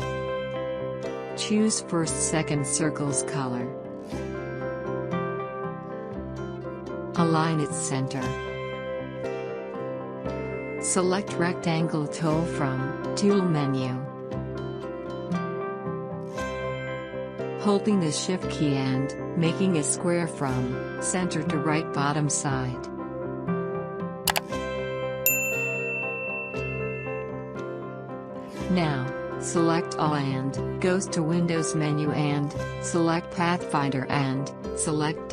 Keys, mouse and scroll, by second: 2.3 click, 3.2 click, 12.8 right click, 14.5 click, 18.8 shift+Num_Lock, 18.8-32.9 shift+drag, 35.1 click.